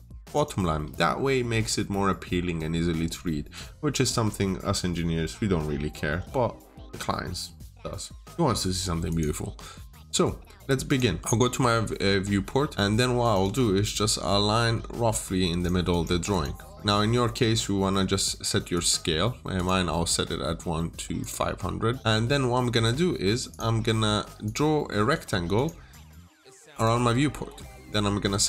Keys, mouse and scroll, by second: 0.7 Delete, 9.0 click, 11.2 scroll up 1, 11.3 middle click, 13.1 click, 13.3 double click, 13.8 middle click, 15.5 click, 15.8 double click, 18.6 click, 22.3 Escape, 23.4 click.